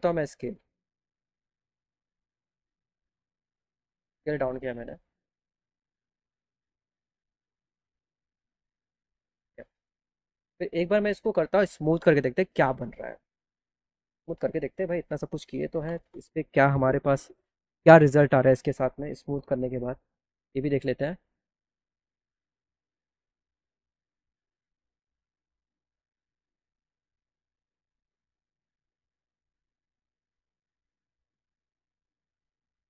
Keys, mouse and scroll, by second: 0.1-2.0 right drag, 2.0-5.0 drag, 7.8 click, 9.4 click, 11.1 right click, 14.7 click, 19.4 m, 20.7 click, 25.2 click.